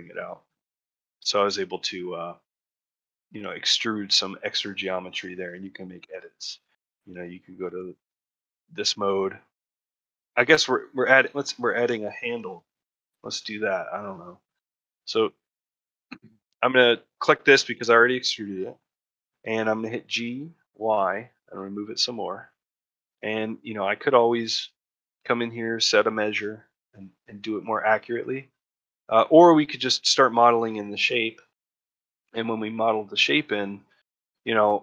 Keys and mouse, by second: 0.0 middle click, 0.4-1.6 middle drag, 2.5 middle click, 3.4 middle click, 3.9-5.0 middle drag, 5.2 shift+middle click, 6.2 shift+middle click, 6.5 middle click, 7.5 2, 8.4 ctrl+middle click, 8.8 shift+middle click, 9.7-10.8 middle drag, 11.2 middle click, 12.4 Tab, 13.0 Tab, 15.0 3, 15.6 middle click, 17.0 middle click, 17.3 shift+middle click, 18.1 middle click, 18.5 shift+middle click, 22.7 middle click, 23.7 shift+middle click, 24.0 middle click, 24.4 ctrl+middle click, 24.7 middle click, 25.2 shift+middle click, 26.4 middle click, 27.4 middle click, 27.9 shift+middle click, 28.2 ctrl+middle click, 28.9 middle click, 30.0 middle click, 30.5 middle click.